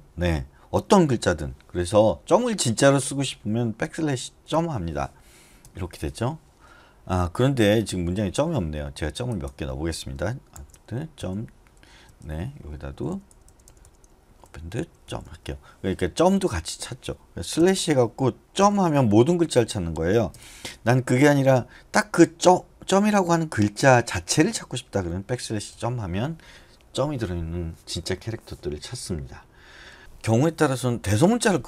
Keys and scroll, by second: 3.8-4.5 typing, 5.6 ], 7.6 Return, 10.5 shift+a, 11.8-15.7 typing, 17.6 /, 18.6 ., 20.3 BackSpace, 24.4 typing, 25.5-26.2 typing.